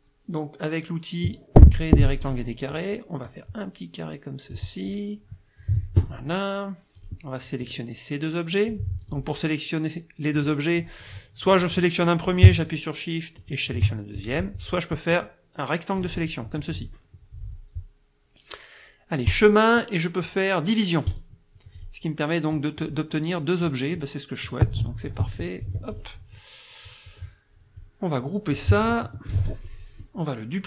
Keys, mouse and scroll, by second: 2.2 click, 3.3-4.7 drag, 7.0 click, 7.6-8.9 drag, 9.0 click, 10.4 click, 11.6 click, 13.4 shift+click, 14.3 shift+click, 15.1-16.2 drag, 19.3 click, 21.1 click, 21.8 click, 22.6 click, 23.7 click, 25.3 ctrl+z, 26.0 ctrl+click, 27.1 click, 29.3 ctrl+g, 29.7 ctrl+click.